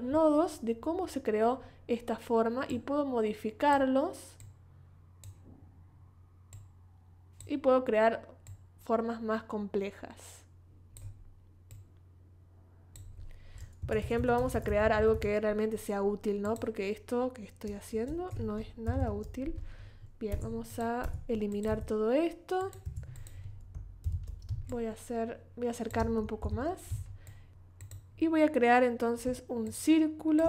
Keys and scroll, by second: 13.8 BackSpace, 17.9 super+z, 18.8 super+-, 22.8 BackSpace, 23.7 super+BackSpace, 24.0 super+=, 24.5 super+space, 25.3 space, 26.4 super+=, 26.9 super+space.